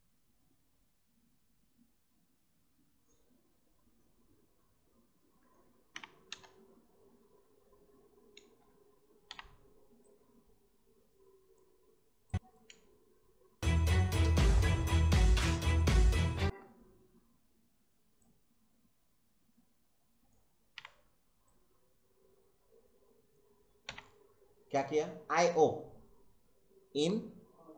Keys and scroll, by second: 5.9 i, 6.3 space, 8.4 space, 9.2 o, 12.7 space, 16.4 space, 20.7 i, 23.8 o.